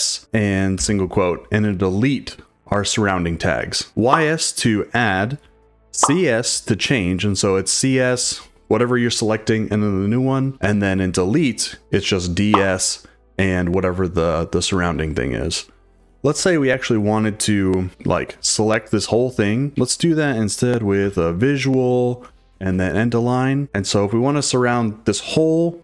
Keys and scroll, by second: 0.0-1.6 typing, 15.7-17.9 typing, 19.4 j, 19.7 Escape, 19.7 k, 21.0 v, 22.5 shift+4, 23.2 h.